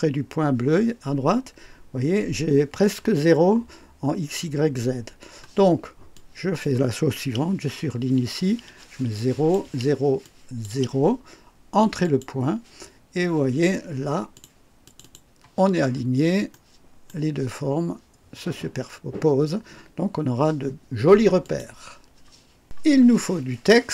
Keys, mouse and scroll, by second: 6.1 click, 8.7 KP_0, 9.1 click, 9.6 KP_0, 10.2 click, 10.7 KP_0, 12.0 click, 14.3 click, 14.8 click, 15.9 scroll up 1, 16.5 right click, 17.0 right click, 18.6-18.9 scroll down 1, 21.4 click.